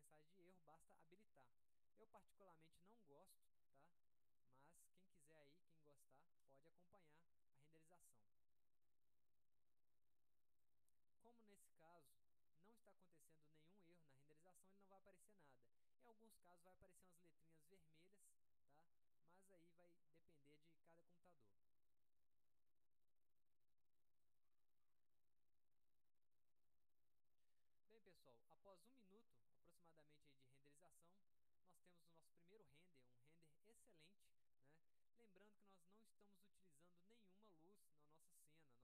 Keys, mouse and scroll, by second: 0.7 click, 1.1 click, 1.5 drag, 2.7 click, 4.4-5.1 drag, 6.5 click, 9.9-11.7 drag.